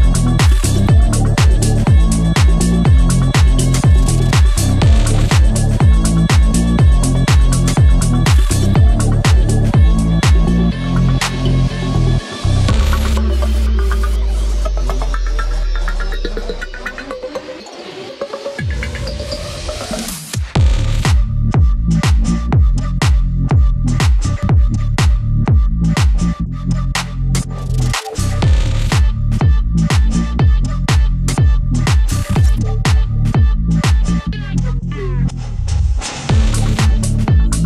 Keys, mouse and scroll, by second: 0.1-1.4 drag, 1.7 scroll up 1, 2.6-3.9 drag, 3.9 scroll down 1, 4.8 scroll up 1, 5.7-7.8 drag, 7.8 scroll down 1, 8.6 scroll up 1, 9.1 click, 9.3 scroll up 1, 10.2-11.7 drag, 11.7 scroll down 1, 12.9 scroll up 1, 13.4 scroll down 1, 14.1 scroll down 1, 14.5 scroll up 1, 15.5 click, 17.5 scroll down 1, 18.2 scroll up 1, 19.5 click, 20.2 scroll down 1, 20.8 scroll up 1, 21.4 click, 21.8-22.4 scroll up 1, 22.4 click, 23.1 scroll down 1, 23.9 scroll up 1, 24.6 click, 25.5 scroll down 1, 26.2-26.7 scroll up 1, 26.7 click, 27.1 scroll up 1, 27.8-31.7 drag, 31.7 scroll down 1, 32.9-34.5 drag, 35.1 scroll down 1, 35.3 scroll up 1, 35.9 space, 36.5 click.